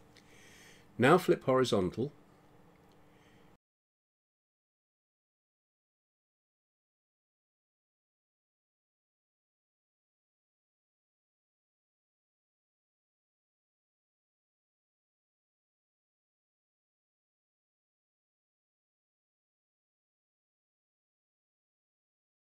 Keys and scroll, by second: 17.5 ctrl+z.